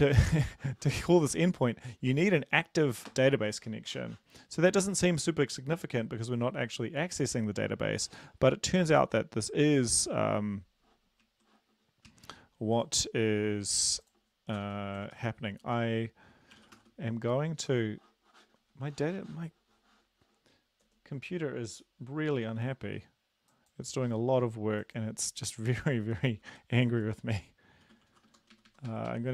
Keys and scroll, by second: 14.6 Return, 15.1 ctrl+v, 15.7 Home, 16.7 typing, 17.7 Escape, 21.2 space, 27.8-28.2 typing, 28.6 ctrl+Right, 28.7 ctrl+Right, 28.9 ctrl+Right, 29.1 ctrl+Right.